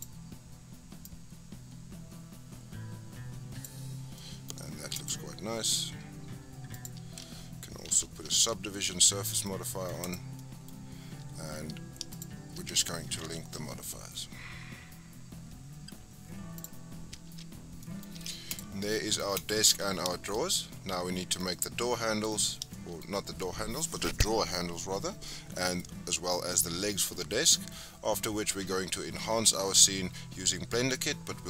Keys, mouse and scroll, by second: 1.0-3.9 drag, 3.9 scroll down 4, 4.2-4.9 middle drag, 4.9 click, 5.3-6.7 scroll up 2, 6.7 click, 7.9 ctrl+2, 8.6 scroll down 2, 8.8-10.0 middle drag, 10.0 click, 10.4-12.1 middle drag, 12.1 shift+click, 13.2 ctrl+l, 17.3 Tab, 17.6 scroll down 5, 17.8 middle click, 18.2 Tab, 18.5 click, 18.8 scroll down 1, 18.8-19.4 middle drag, 19.4 click, 20.1 shift+middle drag, 20.4-20.7 scroll up 3, 20.7-25.1 middle drag, 25.1 scroll down 1, 25.2-27.4 middle drag, 27.4-29.2 scroll down 5.